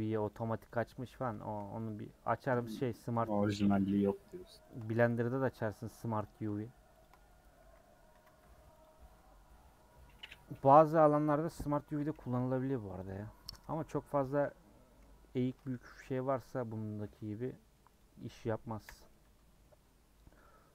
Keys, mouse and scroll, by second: 0.3 click, 1.3 shift+middle click, 1.8 click, 2.4 click, 2.7-4.7 shift+middle drag, 4.7 shift+click, 5.1-6.2 middle drag, 6.2 click, 7.0 shift+click, 8.1 a, 8.8 u, 9.8 middle click, 10.7 scroll down 1, 10.9 middle click, 11.9 a, 13.7 scroll down 1, 13.7 middle click, 14.4 /, 15.0 scroll down 1, 15.4 Tab, 15.8 h, 16.7 middle click, 17.1 scroll down 2, 17.3 middle click, 18.0 click, 18.7 KP_Decimal, 19.2 Tab, 19.6-20.7 middle drag.